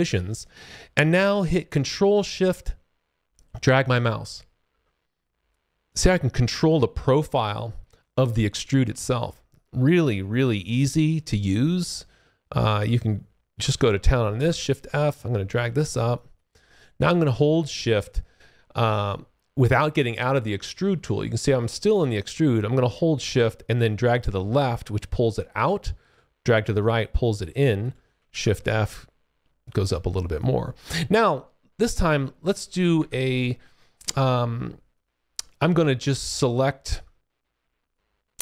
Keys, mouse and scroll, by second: 2.4 ctrl+shift+click, 14.3 shift+f, 14.5 click, 16.1 alt+click, 16.5 alt+middle click, 23.7 shift+click, 28.2 shift+f, 28.4 click, 29.8-30.3 alt+scroll up 1, 30.3 alt+click, 34.9 click, 37.2-37.7 shift+scroll down 1, 38.3 alt+click.